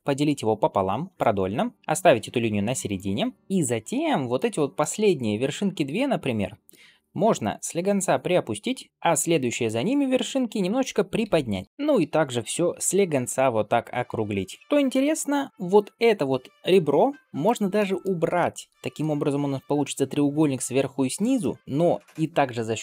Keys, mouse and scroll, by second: 1.7 middle click, 2.8 click, 3.8 middle click, 4.6 middle click, 5.1 click, 5.5 shift+click, 5.9 middle click, 7.2 g, 8.9 click, 9.3 shift+middle click, 9.7 middle click, 11.1 g, 11.6 middle click, 11.6 click, 12.7 g, 13.6 click, 13.9 g, 14.6 middle click, 15.5 g, 17.6 middle click, 18.6 ctrl+x, 21.2 middle click.